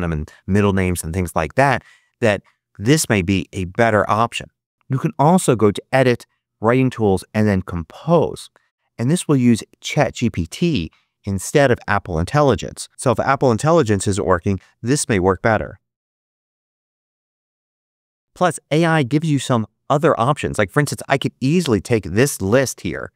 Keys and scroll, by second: 12.9-17.6 typing, 18.2 super+a.